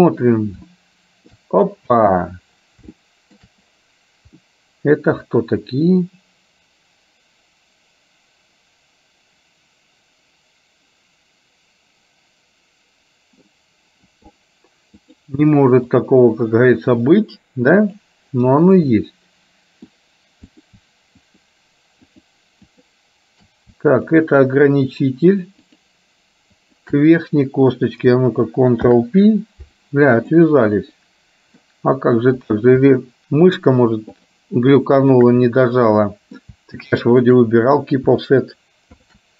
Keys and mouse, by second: 1.0 shift+middle click, 2.0 space, 3.0 shift+middle click, 4.5-13.5 middle drag, 15.1-16.3 drag, 18.1 click, 19.0-20.0 middle drag, 20.5 click, 21.4 shift+click, 22.3-23.3 shift+drag, 24.1 shift+click, 25.9 shift+click, 26.6 shift+click, 28.9 ctrl+p, 31.1 middle click, 33.6 shift+click, 34.1 shift+click, 35.1 shift+click, 35.9 middle click, 37.3 shift+click, 39.0 ctrl+p.